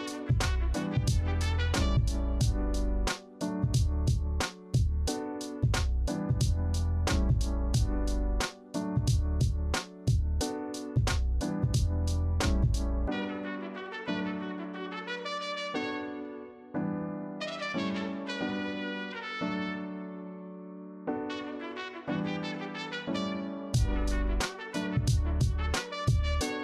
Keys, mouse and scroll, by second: 6.8 alt+scroll up 2, 12.1 alt+scroll down 2, 24.3 ctrl+z.